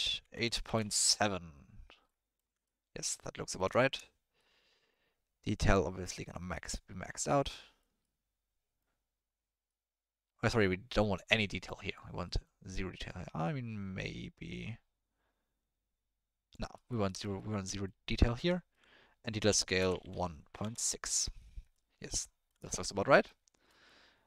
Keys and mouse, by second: 2.0 click, 2.1-2.4 middle drag, 2.6-3.0 ctrl+middle drag, 3.2-3.6 middle drag, 3.7 shift+middle click, 4.4 middle click, 6.2 click, 7.2 middle click, 8.2 middle click, 10.5 middle click, 11.5 click, 12.3 middle click, 13.0-16.5 drag, 16.7 middle click, 17.2 middle drag, 17.5 middle click, 17.8 middle click, 18.6 ctrl+middle click, 19.2-20.6 drag, 21.7 middle click, 22.2 ctrl+middle click, 22.9 middle click, 23.8 middle click.